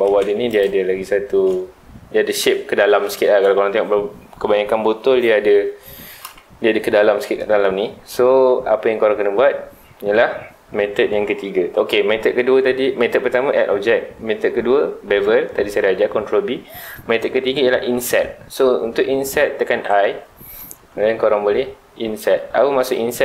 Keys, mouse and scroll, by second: 0.0 middle click, 0.3 3, 0.5 click, 0.8-3.9 scroll up 2.